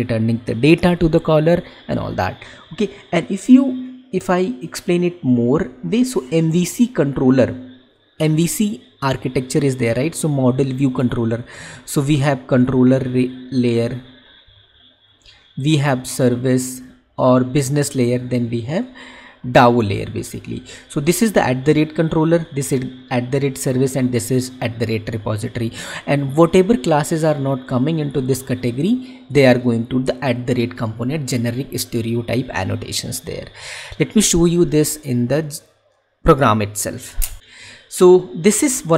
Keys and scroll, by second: 37.4 alt+Tab.